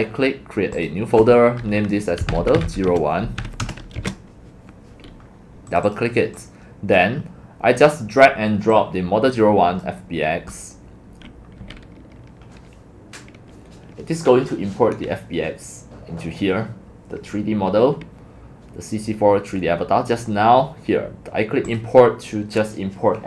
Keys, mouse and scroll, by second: 0.8 click, 1.5 click, 2.0-4.0 typing, 5.2 shift+click, 5.7 shift+click, 5.9 click, 6.3 click, 6.8 click, 7.8 click, 8.7 click, 21.8 click, 22.2 click, 22.3 click.